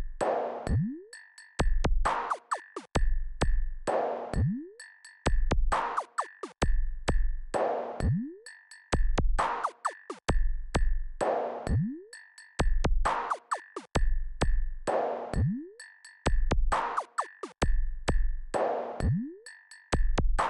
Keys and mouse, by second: 0.0 s, 3.1-4.2 drag, 6.0-8.2 drag, 9.0 KP_8, 9.2 KP_8, 10.6 click, 12.3 click, 14.0-16.2 drag, 17.1-19.5 typing.